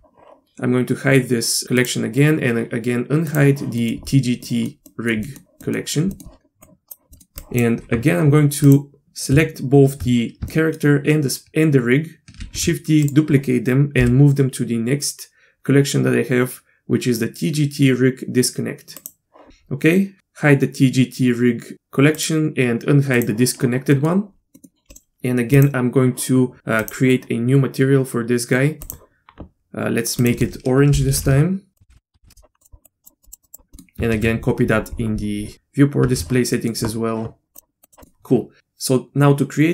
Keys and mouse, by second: 1.8 click, 3.3 click, 3.8 middle click, 4.4 middle drag, 4.9 middle click, 5.3 middle click, 5.6 middle click, 6.1 middle drag, 6.6 drag, 7.1 middle click, 7.6 click, 10.5 shift+middle drag, 12.5 shift+d, 14.0 m, 22.2 click, 23.2 click, 23.9 middle click, 24.6 middle click, 24.9 click, 25.5 click, 26.8 click, 30.2-31.7 drag, 31.8 click, 31.9 BackSpace, 34.1 ctrl+c, 36.0 ctrl+v, 36.5 middle click, 38.0 middle click, 38.6 Tab.